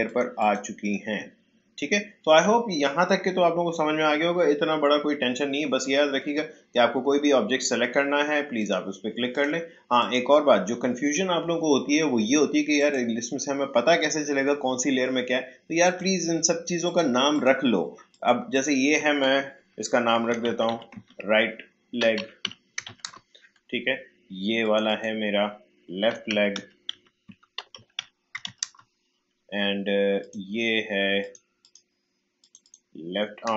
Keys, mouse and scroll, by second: 8.5 click, 12.7 click, 15.8 click, 19.9-23.4 typing, 24.6 click, 25.9-28.9 typing, 30.2 click.